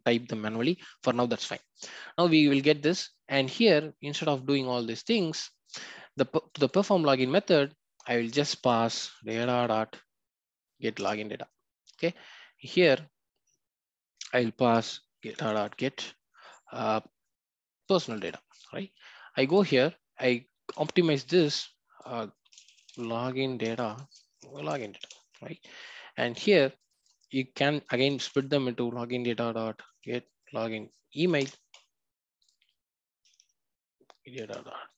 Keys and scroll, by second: 10.9 Return, 19.5 ctrl+b, 23.7 Return, 33.3 Return, 34.3 Return.